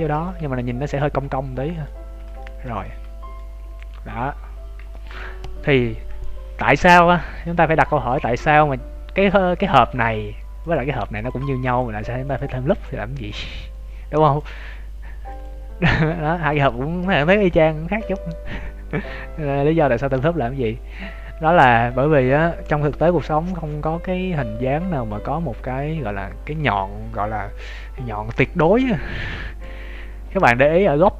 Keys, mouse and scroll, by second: 0.0 ctrl+s, 0.4 z, 0.6 scroll down 2, 1.0 middle click, 2.0 z, 2.4 shift+middle click, 2.8 middle click, 3.6 Tab, 3.8 scroll down 1, 4.3 scroll down 5, 4.9 shift+middle click, 4.9 scroll down 5, 9.8 right click, 10.6 click, 17.4 scroll up 2, 19.9 scroll up 2, 21.2 scroll down 2, 24.6 scroll down 1.